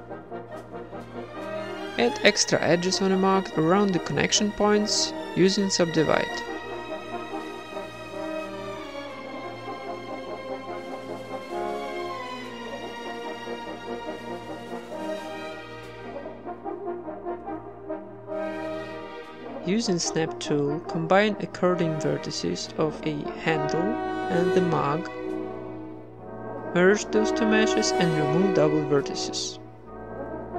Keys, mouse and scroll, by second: 0.0 a, 0.1 middle click, 0.4-1.6 drag, 1.6 right click, 1.8 ctrl+s, 2.0 click, 2.2 Tab, 3.1 click, 3.7 w, 4.8 w, 5.1 ctrl+Tab, 6.3 j, 6.4 right click, 6.9 g, 7.8 right click, 7.9 g, 8.8 right click, 9.6 ctrl+Tab, 9.9 click, 10.0 w, 10.4 ctrl+Tab, 10.8 click, 11.4 j, 11.8 g, 12.3 g, 12.9 right click, 13.0 g, 13.8 middle click, 14.7 ctrl+Tab, 15.0 click, 15.3 shift+right click, 15.4-17.8 typing, 16.3 ctrl+Tab, 18.0 middle click, 18.3 click, 18.4 middle click, 18.9-20.7 typing, 19.2 middle click, 19.3 click, 19.8 middle click, 20.1 Tab, 20.4 Tab, 20.9 Tab, 21.2 Tab, 21.7 middle click, 21.8-25.3 typing, 21.9 right click, 22.1 middle click, 22.4 right click, 23.5 right click, 23.8 ctrl+z, 23.9 click, 24.1 right click, 24.4 ctrl+z, 24.5 click, 25.1 middle click, 25.4 middle click, 25.5 Tab, 25.7 right click, 26.0 ctrl+j, 26.2 Tab, 26.6 a, 26.9 a, 26.9 w, 27.4-28.5 drag, 27.9 Tab, 29.9-30.5 middle drag, 30.1 z.